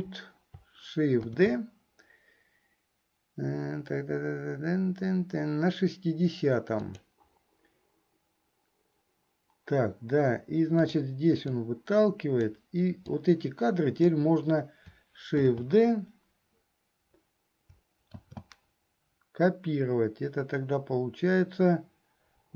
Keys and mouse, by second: 1.4 shift+d, 11.0 click, 11.8-12.8 drag, 13.4 click, 15.4 shift+d.